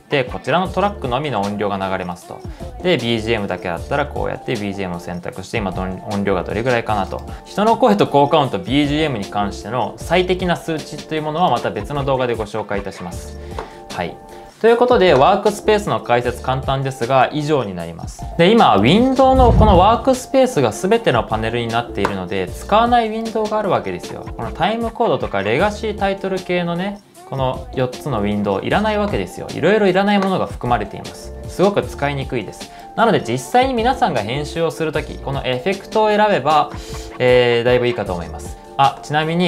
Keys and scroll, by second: 7.1-7.8 typing, 11.9-12.6 typing, 20.7-21.4 typing.